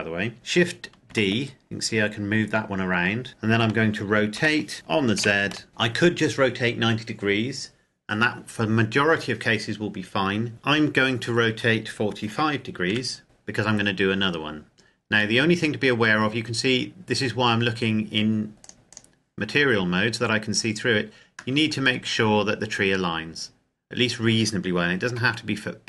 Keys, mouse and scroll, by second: 0.7 shift+d, 2.6 Escape, 4.1 r, 4.9 z, 12.0 KP_4, 12.6 KP_5, 13.2 KP_Enter, 14.2-15.1 scroll up 1, 15.1 middle click, 18.5 click, 20.2-20.8 scroll up 1, 21.4 shift+middle click, 21.7-23.5 scroll down 1, 23.5-24.8 scroll up 1, 24.8 g.